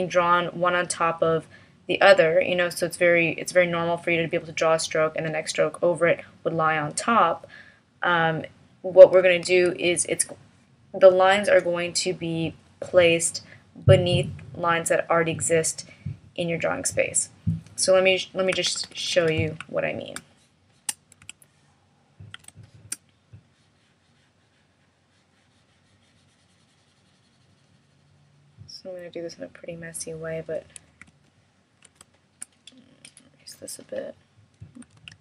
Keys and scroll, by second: 9.5 alt+v, 18.7 super+=, 35.0 super+z.